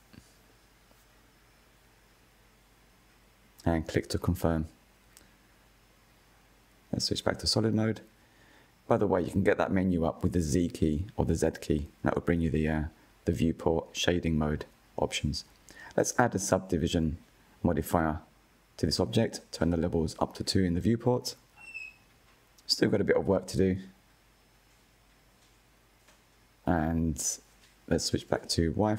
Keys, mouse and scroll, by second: 3.8 Tab, 4.2 scroll down 6, 4.8 click, 5.2-6.0 middle drag, 6.0 z, 7.1-8.8 middle drag, 8.8 click, 9.3-11.1 right drag, 11.1-13.6 middle drag, 13.6 click, 17.3 click, 18.5 click, 19.5-21.2 middle drag, 21.2-22.4 scroll up 2, 22.4 KP_1, 24.6 click, 27.3 click, 28.0-28.6 shift+middle drag, 28.6-28.9 scroll up 2.